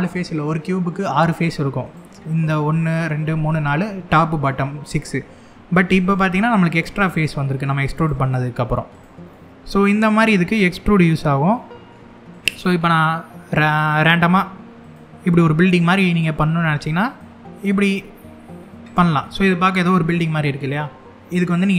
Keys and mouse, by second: 1.5 click, 2.4 click, 6.1 middle click, 6.6 click, 6.9 middle click, 7.6 click, 8.0 middle click, 8.6 click, 9.0 middle click, 11.2 middle click, 12.0 click, 13.9 e, 14.5 click, 15.5 middle click, 16.2 e, 16.7 click, 17.2 click, 18.5 click, 18.9 middle click, 21.0 middle click.